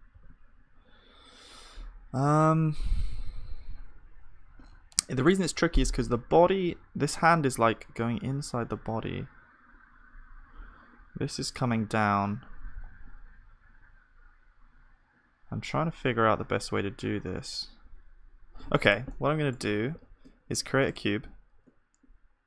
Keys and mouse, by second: 0.1 ctrl+s, 3.1 KP_1, 3.7-21.6 middle drag, 19.1-20.9 drag, 19.9 shift+s, 21.6 shift+a.